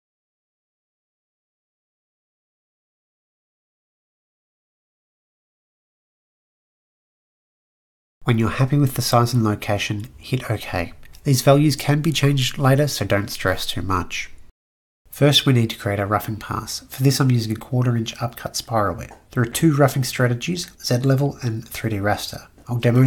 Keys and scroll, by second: 0.7-2.9 typing.